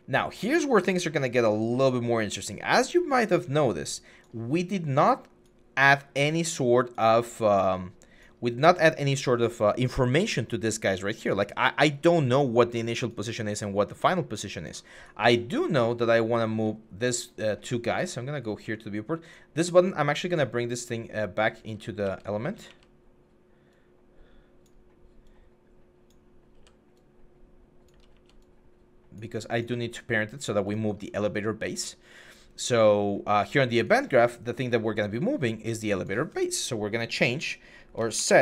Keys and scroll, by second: 21.0-23.0 typing, 26.4 w, 27.9 f, 37.8-38.4 typing.